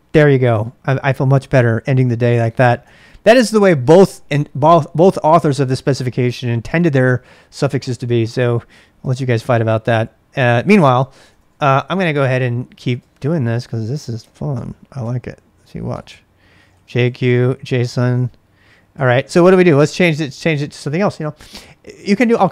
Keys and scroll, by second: 2.8 ctrl+[, 3.0 k, 7.9 k, 9.0-14.5 typing, 12.8 ctrl+[, 15.9-20.4 typing, 20.3 ctrl+[.